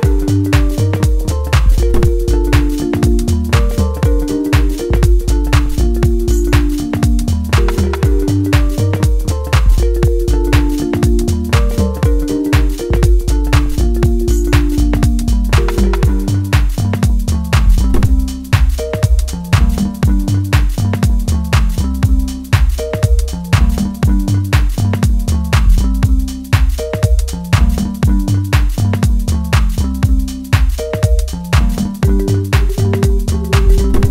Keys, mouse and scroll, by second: 2.2-8.0 drag, 10.7-17.2 middle drag, 17.2 click, 18.4-25.0 middle drag, 25.0-29.0 drag, 29.0-32.8 middle drag, 32.9-34.1 drag.